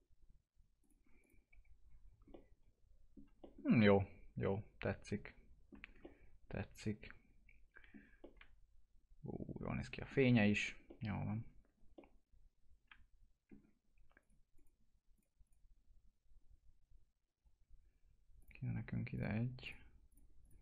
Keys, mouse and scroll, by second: 0.8 click, 1.5 F4, 2.0 scroll down 1, 2.3 alt+middle click, 3.4-5.8 middle drag, 5.8 scroll down 1, 6.0-8.2 alt+middle drag, 8.2-10.4 middle drag, 10.4 scroll up 1, 10.8 alt+middle click, 11.9-14.1 middle drag, 14.1 click, 18.3 click.